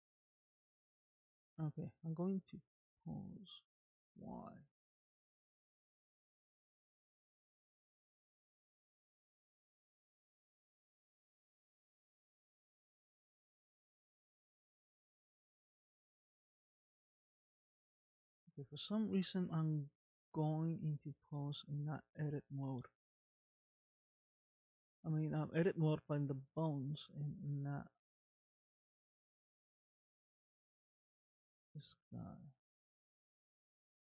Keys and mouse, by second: 0.7 click, 2.2 click, 3.0 Tab, 4.2 Tab, 4.7 ctrl+Tab, 6.2 click, 7.3 Tab, 8.6 Tab, 9.2 Tab, 9.7 Tab, 11.0 click, 11.6 ctrl+Tab, 13.3 middle click, 14.8 click, 15.9 Tab, 17.6 Tab, 17.9 Tab, 18.3 Tab, 18.4 Tab, 18.7 Tab, 18.8 Tab, 19.0 Tab, 19.2 Tab, 19.5 Tab, 20.1 Tab, 20.6 Tab, 21.4 click, 21.8 click, 22.9 Tab, 23.5 Tab, 23.9 Tab, 25.2 Tab, 27.2 click, 29.7 g, 32.2 click, 33.7 g.